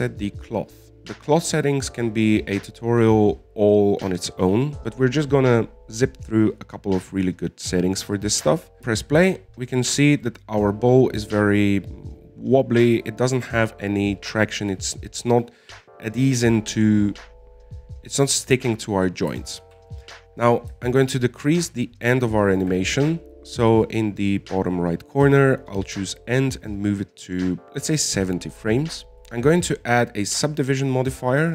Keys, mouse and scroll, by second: 0.1 middle click, 0.5-0.9 scroll up 3, 0.9 right click, 1.0 scroll down 7, 8.8-9.1 scroll down 7, 9.3-10.5 middle drag, 10.5 alt+a, 11.6-12.8 middle drag, 12.8-14.4 scroll up 2, 14.4-17.5 shift+middle drag, 21.0 alt+a, 22.0-23.9 drag, 27.1-29.1 drag, 30.1 click, 31.0-31.5 drag.